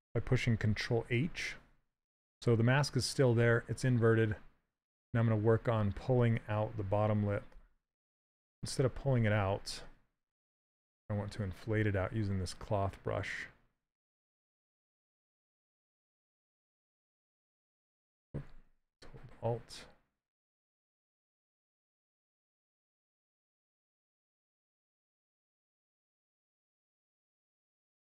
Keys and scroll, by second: 8.4 s.